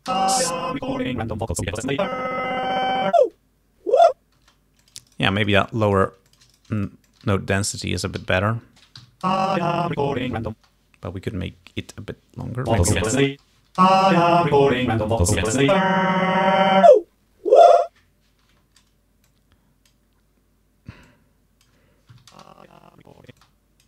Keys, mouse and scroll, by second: 0.2 space, 4.5 space, 4.9 shift+click, 5.2 shift+right click, 5.6 ctrl+shift+click, 6.4 ctrl+shift+click, 6.6 ctrl+shift+right click, 7.4 click, 8.3 alt+d, 9.1 Home, 9.3 space, 10.7 space, 12.0 click, 12.8 space, 13.7 Home, 13.9 space, 18.5 space, 19.3 click, 21.1 click, 22.2 Home, 22.4 space, 23.4 space, 23.5 click.